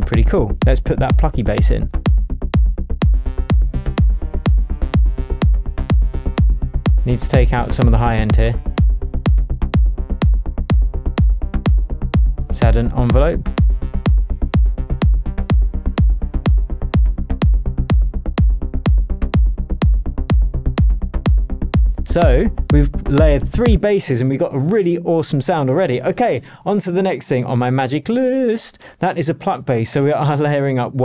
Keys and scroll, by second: 23.7 space, 24.2 super+space, 24.3 super+s.